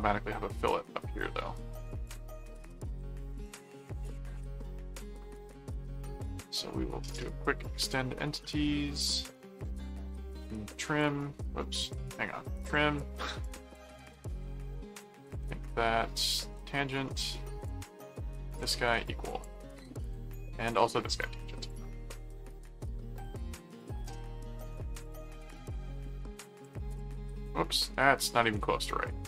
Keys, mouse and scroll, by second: 2.0 click, 3.3 click, 4.0 click, 4.9 click, 6.0 click, 7.0 click, 7.8 click, 9.3 right click, 10.3 right click, 10.8 click, 11.8 click, 12.1 right click, 12.7 click, 13.4 click, 14.3 ctrl+click, 15.2 ctrl+alt+click, 16.4 alt+a, 17.6 ctrl+click, 18.5 ctrl+alt+click, 18.8 ctrl+alt+q, 19.3 click, 20.0 ctrl+click, 20.6 ctrl+alt+click, 21.0 ctrl+alt+a, 21.6 click, 23.2 click, 24.0 right click, 25.0 click, 26.5 click.